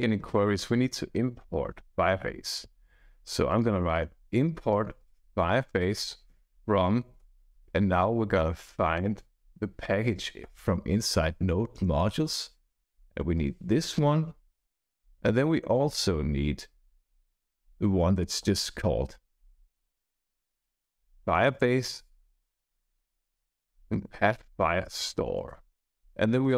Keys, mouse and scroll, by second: 3.6-7.8 typing, 8.9 Return, 10.4 shift+/, 11.7 Return, 12.2-14.3 typing, 13.9 Right, 14.7 Return, 17.0-25.2 typing, 25.3 Return, 25.9 Right.